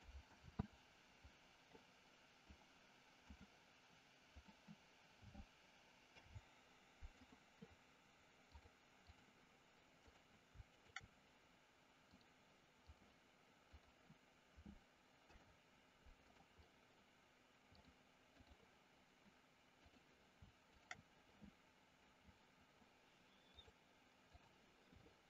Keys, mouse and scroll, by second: 0.3 ctrl+z, 2.4-3.4 drag, 6.0 ctrl+p, 8.4 click, 10.7 shift+click, 12.1 click, 13.7 click, 15.1 ctrl+p, 17.7 click, 20.7 shift+click, 23.5-24.5 drag.